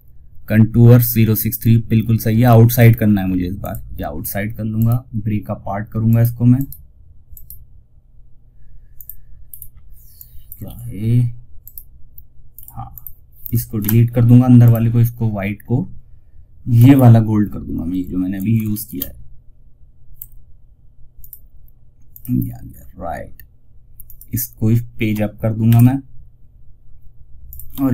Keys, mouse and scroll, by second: 2.0 click, 2.9 click, 4.1 right click, 8.3 click, 8.7 scroll up 1, 9.4 click, 9.9 ctrl+z, 10.9 right click, 14.7-15.2 scroll down 2, 16.2 scroll up 1, 19.5 ctrl+alt+shift+s, 20.5 click, 21.9 scroll down 1, 23.3 click, 25.0 shift+Page_Up, 26.7 click, 27.4-27.9 typing.